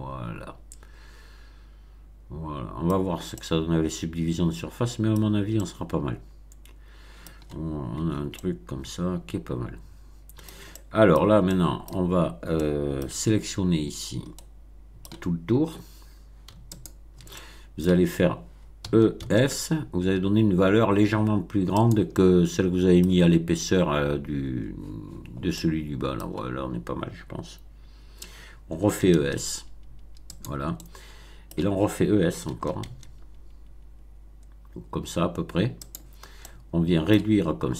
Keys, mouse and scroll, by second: 3.0 scroll down 1, 3.3-5.1 middle drag, 5.1 scroll down 1, 5.5-7.4 middle drag, 8.0 Tab, 8.3-10.6 middle drag, 10.7-11.3 middle drag, 11.4-12.0 shift+middle drag, 12.5 middle click, 13.1 Tab, 14.3 middle click, 16.7 alt+click, 17.3 alt+middle click, 18.8 e, 19.1 s, 21.7 click, 22.0-23.2 middle drag, 25.5 middle click, 28.8 e, 29.1 s, 30.2 click, 30.7 middle click, 32.4 e, 32.8 s, 35.8 click, 36.4-37.3 middle drag.